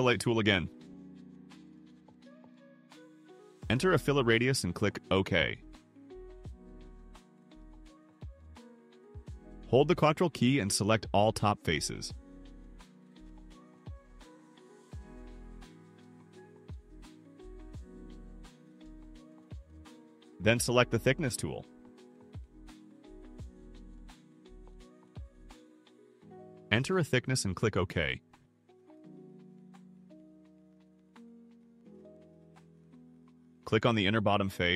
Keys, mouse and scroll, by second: 0.9 click, 3.5 0, 5.5 click, 8.3 click, 11.6 ctrl+click, 12.0 ctrl+click, 12.6 ctrl+click, 13.0 ctrl+click, 14.1 ctrl+click, 15.1 ctrl+click, 15.5 ctrl+scroll up 2, 16.1 ctrl+click, 16.4 ctrl+click, 16.8 ctrl+click, 17.1 ctrl+click, 17.5 scroll down 2, 22.5 click, 24.8 1, 25.2 5, 27.3 click, 31.1 click, 32.4 click, 34.2 click.